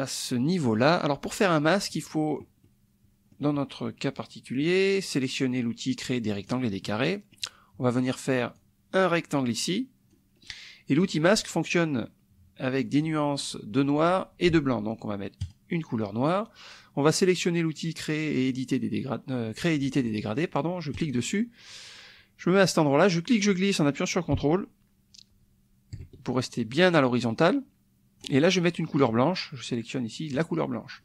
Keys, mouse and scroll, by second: 2.6 click, 6.4 click, 6.8 click, 8.6-10.2 drag, 10.4 middle click, 10.9 click, 15.4 click, 21.0 click, 23.1-28.4 drag, 30.3 click.